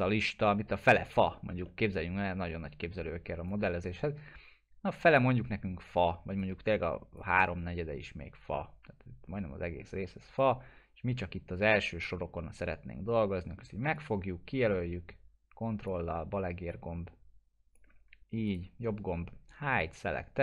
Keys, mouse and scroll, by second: 1.0 click, 1.3 middle click, 1.9-3.1 alt+middle drag, 3.8-5.3 drag, 7.4-9.3 middle drag, 10.4-11.6 ctrl+drag, 12.4-13.6 middle drag, 13.9-16.1 ctrl+drag, 18.5 right click, 19.7 click, 19.7 click.